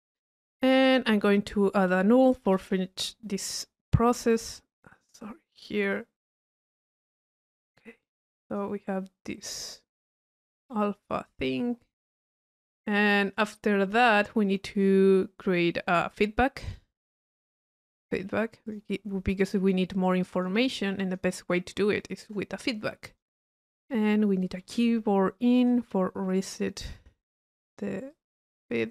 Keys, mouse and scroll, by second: 1.2 right click, 1.7 click, 2.5 u, 3.4 click, 4.4 click, 5.0-5.8 drag, 5.9 click, 7.6 click, 8.1 middle click, 8.4 drag, 9.2 click, 10.0 middle click, 10.0-11.2 right drag, 11.3-12.1 drag, 15.7-16.8 middle drag, 16.8-17.5 drag, 18.7 click, 19.4 click, 20.1-21.2 drag, 21.7 click, 23.1 click, 25.6 click, 27.4-27.8 drag.